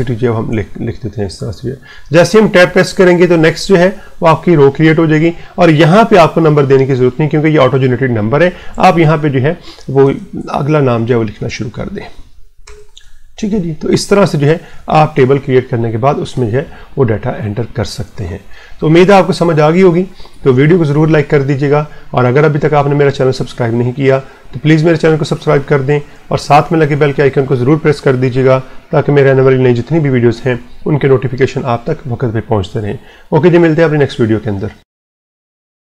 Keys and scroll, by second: 0.1-1.2 typing, 2.6 Tab, 9.8-12.2 typing, 11.5 Tab, 12.9 Tab, 13.9-15.3 typing, 16.2 Tab.